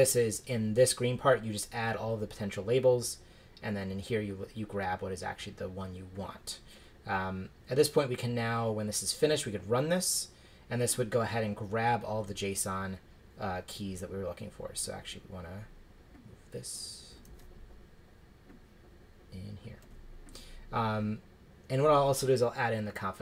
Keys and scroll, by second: 17.2 super+c, 19.8 super+v.